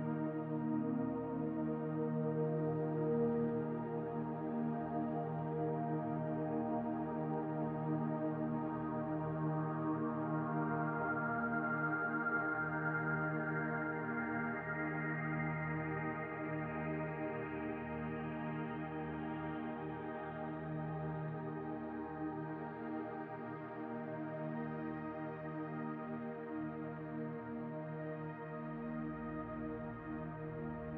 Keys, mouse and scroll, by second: 1.3 click, 2.6 middle click, 3.3 scroll up 2, 4.1 click, 5.0 middle click, 6.0 scroll down 2, 6.4 scroll up 1, 6.6 middle click, 7.1 click, 8.2 middle click, 8.7 click, 10.1 click, 11.7 click, 13.1 click, 14.0 click, 15.6 click, 16.5 click, 18.3 click, 18.7 click, 19.7 middle click, 20.1 scroll up 2, 20.3 middle click, 21.1 scroll down 2, 22.0 middle click, 22.2 middle click, 24.6 click, 25.4-25.8 scroll down 1, 26.8 click, 28.6 click, 28.8 scroll down 2, 29.4 click, 29.4-29.8 scroll down 4.